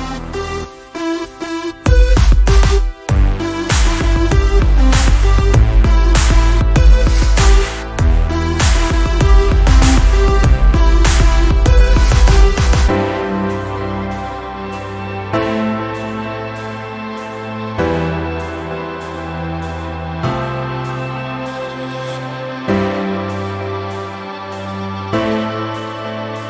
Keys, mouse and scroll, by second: 4.8 Delete, 6.7 F1, 8.0 click, 11.0 Delete, 11.7 p, 12.6 click, 21.9 ctrl+shift+v, 23.2 click, 25.0-25.8 ctrl+scroll up 2, 25.9-26.3 ctrl+scroll down 1, 26.3-26.4 ctrl+scroll up 1.